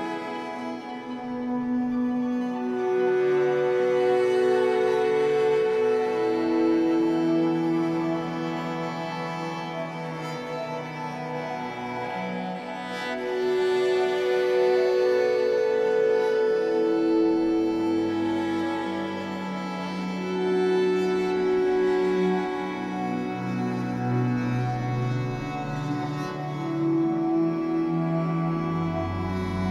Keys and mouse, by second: 0.0-3.5 drag, 4.6 click, 6.3 click, 7.3 click, 8.3 click, 10.2 click, 12.0 click, 14.3 click, 15.1 click, 17.1 click, 17.8-19.2 drag, 19.9 click, 21.7 click, 22.9 click, 24.4 click, 24.8 click, 25.4 click, 26.4 click, 27.4 click.